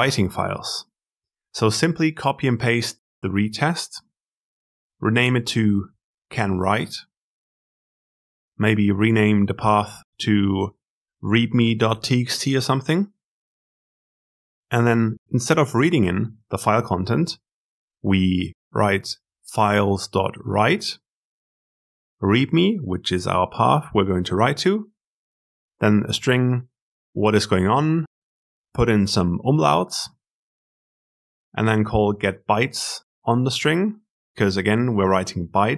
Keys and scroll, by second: 4.6 alt+Insert.